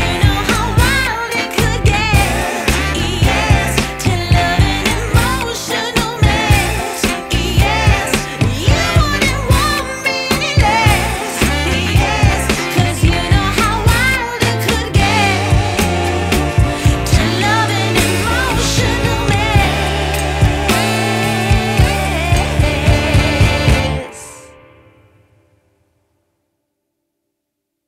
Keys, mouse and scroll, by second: 0.9 ctrl+s, 4.7-7.0 middle drag, 7.0-10.2 drag, 10.6 ctrl+s, 10.9 space, 11.8 shift+Left, 12.4 Right, 13.2 shift+Left, 13.9 shift+Right, 15.0 shift+Left, 16.7 shift+Right, 18.6 shift+Left, 20.5 ctrl+s, 20.9 click, 22.5-23.0 scroll down 5, 23.7-24.1 drag, 24.1-24.5 scroll down 6.